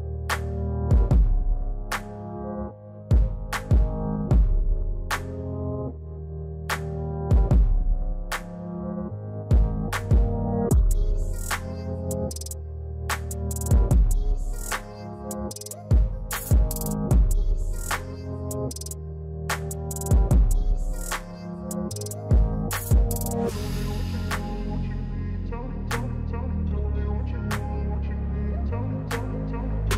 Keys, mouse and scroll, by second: 7.3-10.1 drag, 10.1 alt+scroll down 1, 11.8 alt+scroll up 1, 12.1 click, 15.5 alt+scroll down 1, 16.0 click, 16.3 alt+scroll down 1, 16.5 scroll up 1, 16.8 click, 17.6 alt+scroll up 1, 18.3 click, 20.8 scroll down 1, 25.2 click, 25.7-26.7 alt+scroll up 1, 26.8 click, 28.6 click.